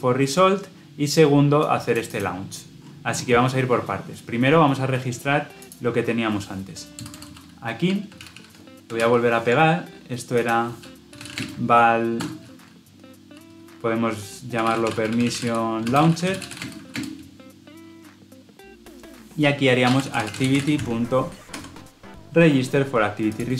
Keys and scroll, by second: 8.9 ctrl+v, 21.4 Escape.